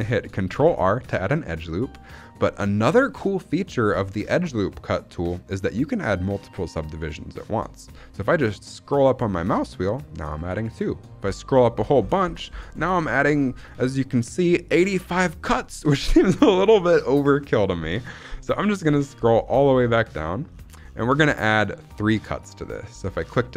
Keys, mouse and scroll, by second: 0.0 shift+middle click, 0.3 scroll up 1, 0.5 ctrl+r.